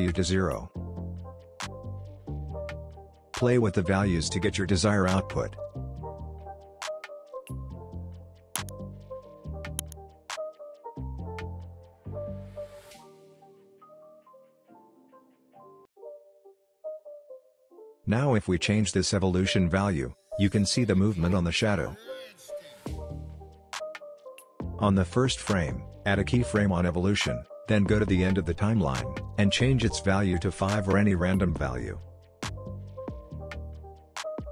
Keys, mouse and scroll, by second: 0.7-1.9 drag, 2.3-2.8 scroll up 1, 2.8 space, 2.9-3.5 click, 3.3 space, 4.4-6.6 drag, 6.8-7.2 scroll down 1, 7.2-9.0 scroll up 1, 12.0-16.1 drag, 16.1-17.7 scroll down 1, 17.7-19.1 scroll up 1, 19.1-22.2 drag, 23.4 ctrl+z, 24.4-25.0 drag, 30.2 Return, 31.3 click, 31.7 space.